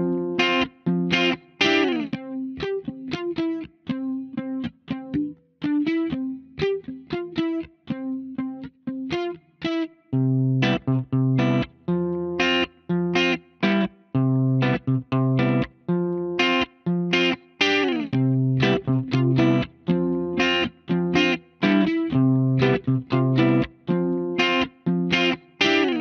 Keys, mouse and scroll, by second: 0.4 shift+middle click, 2.1 shift+middle click.